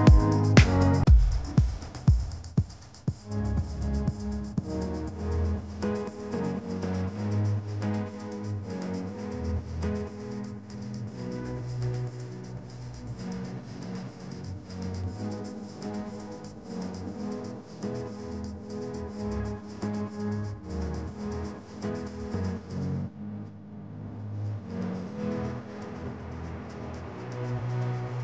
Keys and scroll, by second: 11.9-13.9 typing, 19.6 shift+l, 23.1 ctrl+z, 27.7 shift+Down, 28.1 Up.